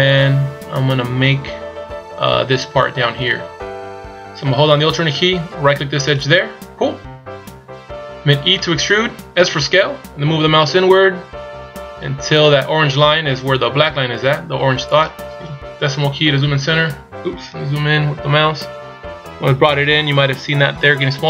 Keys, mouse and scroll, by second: 1.1 scroll up 1, 6.1 alt+right click, 8.6 e, 16.2 KP_Decimal, 17.6-18.2 scroll up 6, 18.2-18.6 scroll down 3.